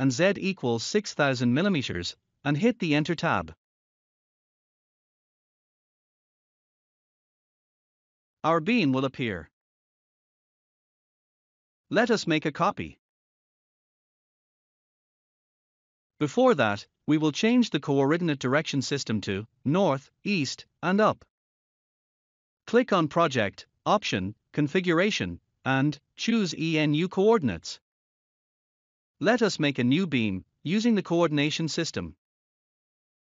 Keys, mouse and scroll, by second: 1.1 Tab, 3.9 6, 7.7 typing, 8.3 Return, 10.2 scroll up 1, 12.9 scroll up 1, 21.9 click, 24.3 click, 28.7 scroll up 1, 31.6 click.